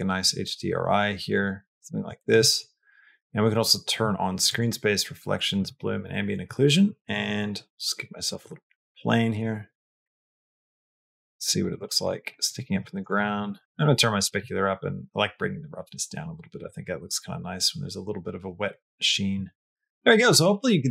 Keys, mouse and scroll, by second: 2.0 shift+middle click, 2.3 middle click, 2.7 middle click, 4.3 click, 5.4 click, 5.7 click, 7.0 shift+a, 8.6 s, 9.6 g, 11.1 middle click, 11.7 shift+middle click, 12.1 middle click, 13.0 g, 13.8 click, 14.8-16.4 drag, 17.1 middle click, 17.6 middle click, 18.5 middle click.